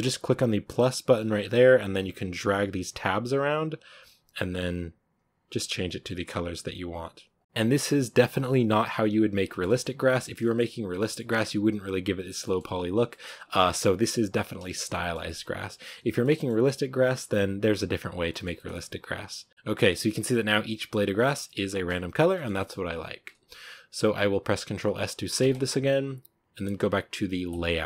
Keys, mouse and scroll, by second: 2.3-4.4 drag, 6.8-7.3 scroll up 1, 7.3 click, 9.4-11.0 shift+middle drag, 11.0 scroll up 3, 11.3-12.6 shift+middle drag, 12.6-13.3 scroll up 1, 13.3 scroll down 3, 13.5-15.4 shift+middle drag, 15.4-16.6 scroll down 1, 16.6-20.0 middle drag, 20.0-20.6 scroll up 4, 20.6-21.1 scroll up 1, 21.1 scroll down 1, 21.3-27.4 middle drag, 27.4-27.8 drag.